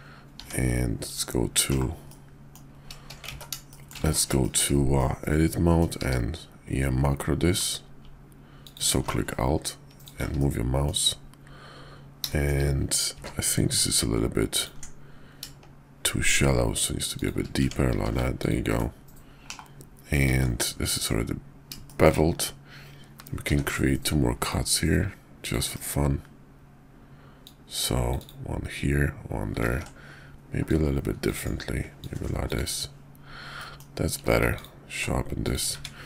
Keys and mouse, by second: 0.3 Tab, 1.7 /, 2.1 click, 3.2 ctrl+z, 3.6 shift+click, 3.7 shift+middle click, 4.0 ctrl+z, 4.3 shift+middle click, 4.9 middle click, 6.0 q, 10.4 click, 12.3 shift+click, 13.0 q, 17.6 Tab, 18.0 q, 19.5 /, 20.2 alt+x, 21.9 shift+click, 23.5 d, 27.4-28.5 drag, 29.6 ctrl+z, 30.6 click, 32.0-32.9 drag, 33.6 middle click, 34.1 q, 35.4 click, 35.7 `.